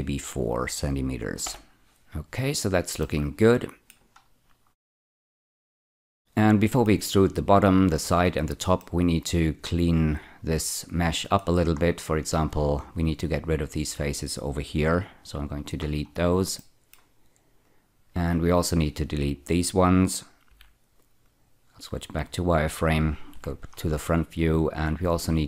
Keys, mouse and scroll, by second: 1.4 Return, 2.0-2.9 scroll down 4, 3.3 middle click, 4.2-5.2 scroll up 3, 5.6 middle click, 8.7-11.3 middle drag, 11.6 scroll up 2, 12.4 click, 13.6 shift+click, 14.7 x, 15.4 click, 15.8-16.5 scroll down 4, 16.5 middle click, 17.6 click, 20.5 z, 21.2 click, 23.3 F4.